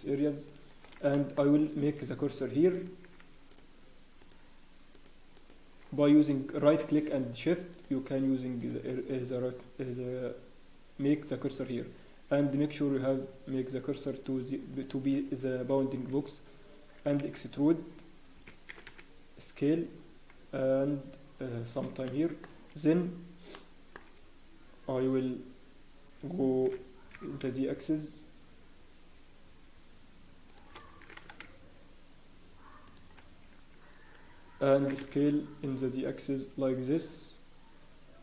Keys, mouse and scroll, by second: 0.4 shift+click, 1.1 shift+middle click, 1.4 scroll up 1, 1.8 scroll down 1, 3.8 shift+right click, 3.8-4.2 scroll up 1, 4.2 shift+right click, 4.2 shift+click, 4.2 scroll down 1, 4.9 shift+right click, 8.5 shift+right click, 8.8 shift+right click, 9.0 scroll up 1, 9.4 scroll down 1, 11.5 scroll up 2, 13.6 click, 22.1 shift+middle click, 23.5 shift+middle click, 26.3 scroll up 1, 26.6 g, 31.4 shift+s.